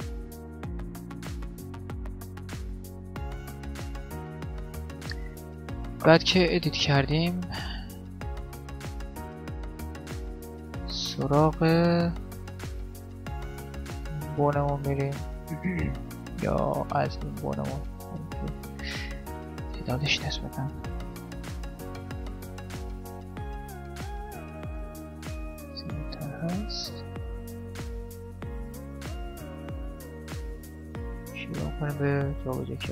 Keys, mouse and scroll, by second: 0.7 right click, 0.9 g, 1.2 click, 1.3 middle click, 1.7 click, 1.7 right click, 2.1 click, 2.5-5.2 middle drag, 2.6 g, 3.6 KP_7, 4.8 KP_7, 5.5-8.1 middle drag, 6.3 click, 7.3 click, 8.1 right click, 8.1 middle click, 9.2 middle click, 9.9 KP_7, 10.1-13.7 middle drag, 13.4-19.7 right drag, 19.7-21.5 middle drag, 20.7 shift+f, 22.9 shift+d, 24.4 r, 25.3 g, 26.1 r, 27.5 g, 28.9-30.1 middle drag, 30.1 click, 31.0-32.9 right drag.